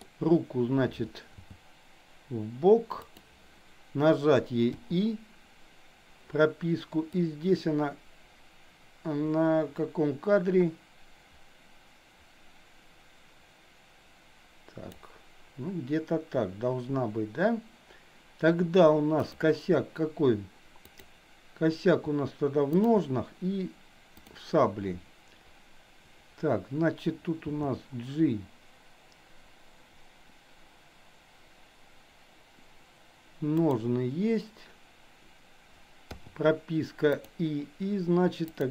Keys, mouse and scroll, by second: 1.3 g, 7.2-15.0 drag, 19.2 click, 21.0 click, 22.8 shift+click, 27.5 g, 36.1 i, 37.1 click, 38.5 click.